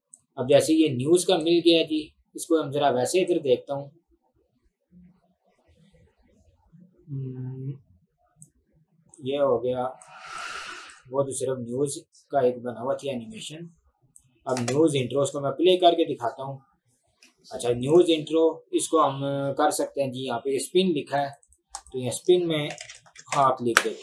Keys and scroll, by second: 14.6 space, 17.4 space, 22.6-23.8 typing.